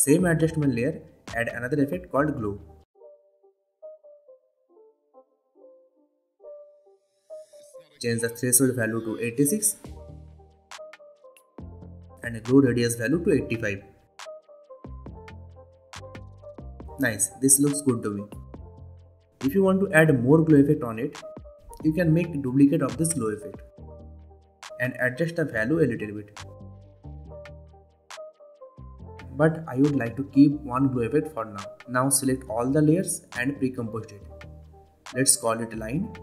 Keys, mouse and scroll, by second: 3.8 click, 4.4-5.6 typing, 6.4 click, 10.1 click, 11.9 Return, 13.0 click, 15.8 Return, 17.9-18.8 drag, 20.1 scroll down 1, 21.7 click, 22.6 ctrl+d, 25.3-26.5 click, 28.2 ctrl+z, 30.1 click, 31.2 Delete, 31.8-32.7 click, 32.9 right click, 33.9 click, 35.1-36.2 typing.